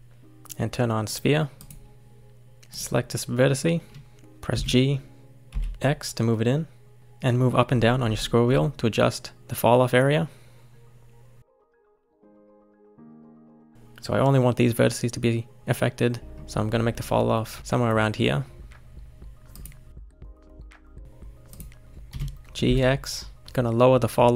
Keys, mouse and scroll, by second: 2.7 click, 4.5 g, 19.9 click, 20.1 scroll down 3, 20.4 shift+middle click, 20.7-21.5 scroll up 5, 21.5 click, 22.1 g.